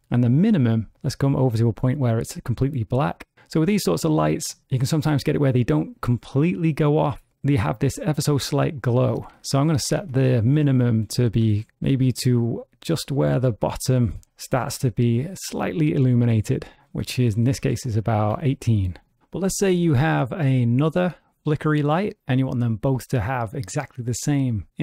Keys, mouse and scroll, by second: 1.3 click, 8.7 click, 10.2 KP_0, 16.7 click, 21.0 click.